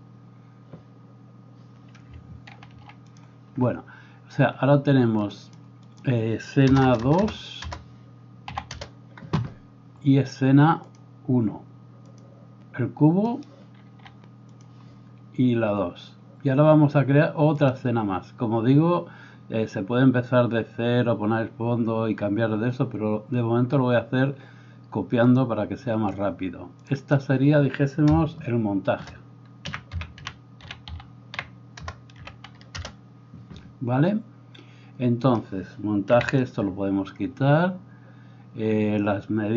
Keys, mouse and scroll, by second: 2.7 ctrl+2, 5.3-14.6 drag, 6.9 BackSpace, 7.0 BackSpace, 13.9 s, 17.7-39.5 drag, 36.1 x.